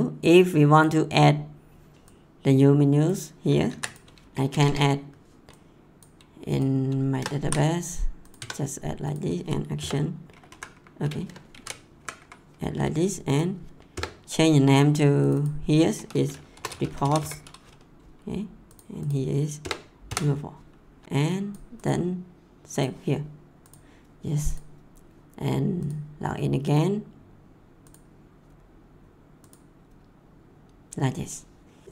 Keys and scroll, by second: 3.7 ctrl+c, 4.5 Return, 7.4 ctrl+v, 8.3 Tab, 9.8 BackSpace, 10.5 Up, 11.5 ctrl+z, 12.0 Up, 13.9 BackSpace, 16.3-17.6 typing, 19.6 BackSpace, 20.0 4.